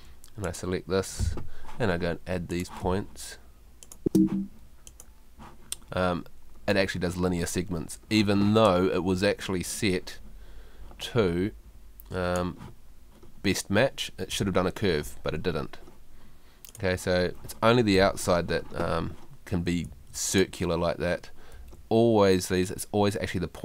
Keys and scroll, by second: 2.8 space, 18.0 Escape, 19.9 Escape, 21.6 Escape.